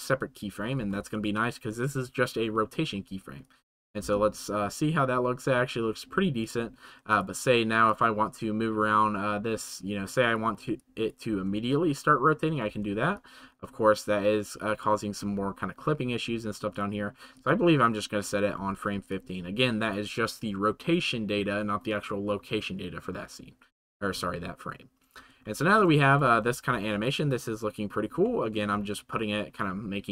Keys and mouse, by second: 0.0 click, 3.4 click, 6.4 click, 7.1 click, 7.9 click, 10.8 click, 11.3 space, 13.1-14.8 drag, 17.3 click, 19.1 click, 25.6 shift+middle drag, 28.2 shift+middle drag.